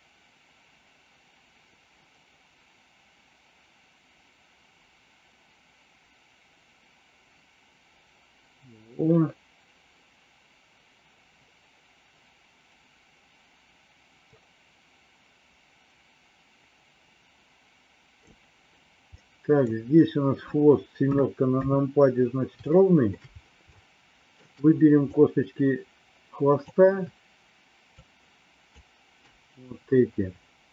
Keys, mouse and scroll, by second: 19.2 middle click, 21.0 KP_6, 21.6 KP_7, 22.7 shift+middle click, 23.7 shift+middle click, 25.1-26.6 drag, 28.0 shift+click.